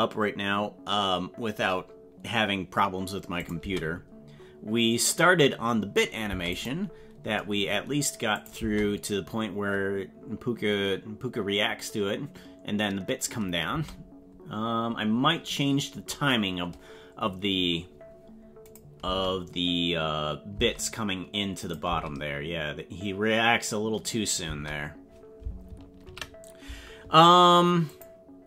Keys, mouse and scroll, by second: 3.4 click, 3.6 space, 6.3 space, 6.5 click, 8.3 click, 8.6 space, 18.7 click, 19.0 space, 20.5 space, 21.6 click, 21.9 space, 24.4 space, 26.1 ctrl+s.